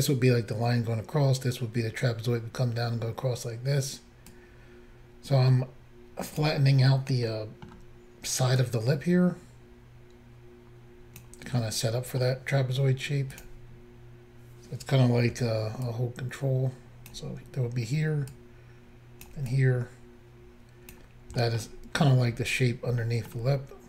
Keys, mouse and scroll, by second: 4.3 click, 7.3 middle click, 8.6 click, 8.6-8.9 scroll up 1, 11.6 middle click, 13.4 click, 15.9 ctrl+click, 18.3 ctrl+click, 19.5 click, 21.4 middle click, 21.8-22.2 scroll up 1, 23.0 scroll up 1, 23.1 middle click, 23.1-23.5 scroll down 2, 23.4 scroll up 1.